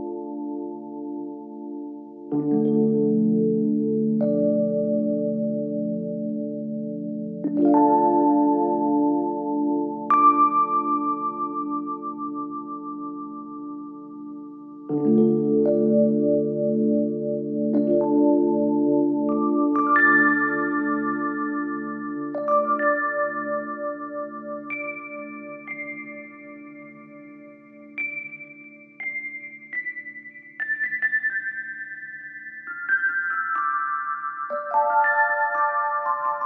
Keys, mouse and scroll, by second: 4.1 click, 7.7 click, 8.7-10.6 typing, 11.7 click, 16.3 click, 19.3 click, 20.7 alt+scroll up 1, 22.9 ctrl+t, 24.4 click, 24.9 ctrl+t, 25.8-36.4 drag.